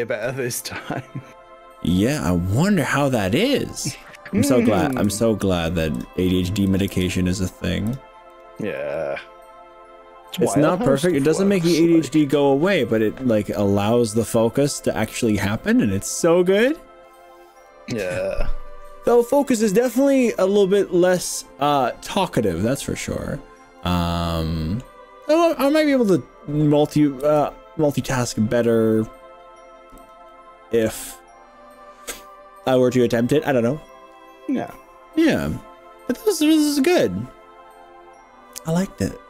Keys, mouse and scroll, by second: 0.3 g, 1.6-2.2 scroll up 4, 4.1 click, 4.7 click, 5.0 g, 6.0 click, 6.7 click, 7.0 g, 7.8 g, 8.0 click, 8.4 click, 8.8 g, 11.2 click, 12.0 middle click, 13.0 middle click, 14.0 click, 14.5-15.3 scroll down 5, 15.7 middle click, 22.1 middle click, 23.0-23.4 scroll up 3, 23.8-25.0 middle drag, 25.6 click, 26.0-27.0 middle drag, 26.0 scroll up 1, 27.4 g, 30.0 click, 30.4-32.8 middle drag.